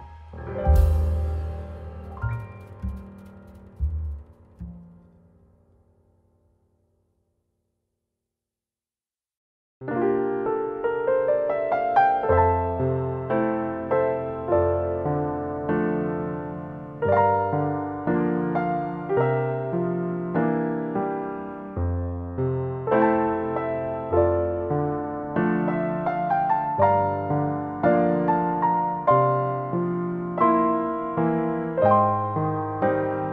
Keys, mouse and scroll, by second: 1.6-2.2 scroll up 2, 3.7-4.3 scroll up 1, 4.3-4.7 scroll up 1, 4.7 click, 7.5 click, 11.1-11.5 scroll down 2, 11.5 middle click, 16.0 click, 22.4 middle click, 23.5-24.2 scroll down 2, 24.2 middle click, 27.1 click, 30.8 middle click, 31.9-32.3 scroll down 4, 32.7-33.1 scroll down 3.